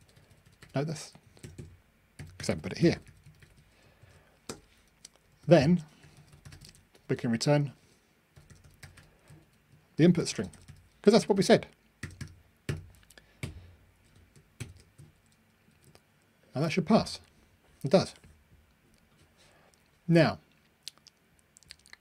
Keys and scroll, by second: 14.7 super+F9.